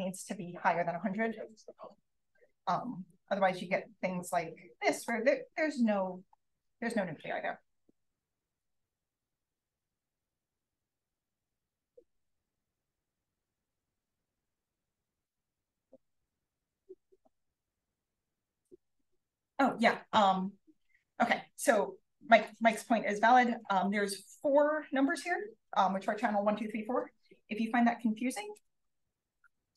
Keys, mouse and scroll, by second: 1.2 1, 2.0 0, 2.5-3.1 scroll down 2, 3.1 drag, 4.2 d, 6.3 d, 13.9-14.6 scroll down 1, 14.6-16.6 scroll down 1, 16.6-17.0 scroll down 1, 17.0-17.9 scroll up 1, 17.9 click, 17.9-18.9 scroll up 1, 18.9-19.4 scroll up 1, 18.9-19.3 drag, 19.6 click, 22.4 click, 28.5 click, 28.9 click, 29.4 click.